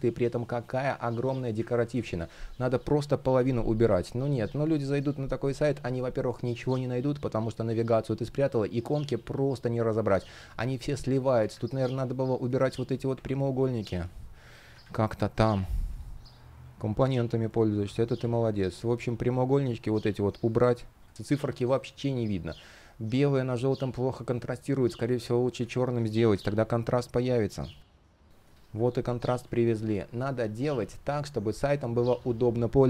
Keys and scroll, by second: 1.4 super+z, 10.7 super+z, 12.7 BackSpace, 13.5 super+z, 14.4 super+\, 21.1 shift+p, 26.0 super+\, 28.3 super+\.